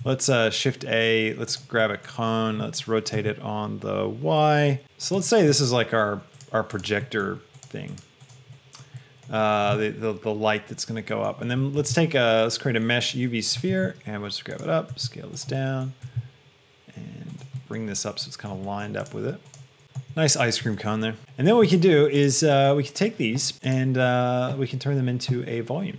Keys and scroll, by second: 0.0 shift+a, 3.4 r, 11.8 shift+a, 13.6 g, 14.0 z, 15.2 s, 16.2 s.